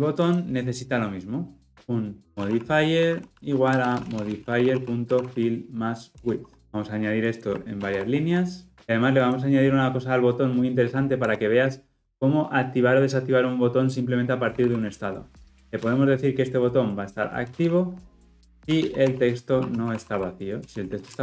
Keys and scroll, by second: 6.2 Return, 9.0 alt+Return, 15.8 Return, 18.2 Return, 19.5 Return, 20.6 Return.